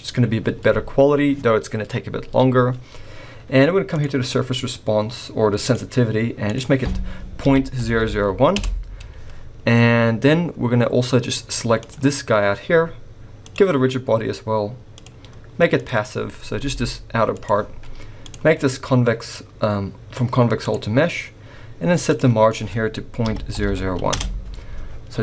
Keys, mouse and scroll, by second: 3.9 click, 5.6 click, 6.4 click, 7.9 0, 9.8-10.9 scroll down 2, 11.8 click, 13.4 click, 14.9 click, 16.6 g, 18.2 click, 20.7 click, 22.0 click, 23.6 0.